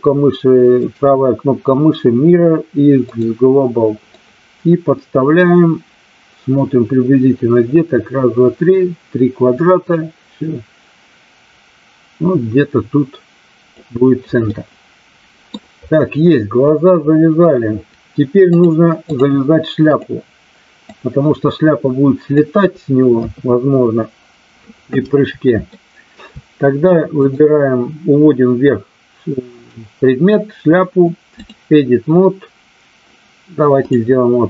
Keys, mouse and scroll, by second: 0.7-3.1 right drag, 4.1-13.6 drag, 14.5-15.5 middle drag, 18.5-19.1 drag, 21.0-22.4 drag, 23.1 KP_3, 25.7-26.1 shift+middle drag, 27.1 click, 29.6-31.5 drag, 33.8 click.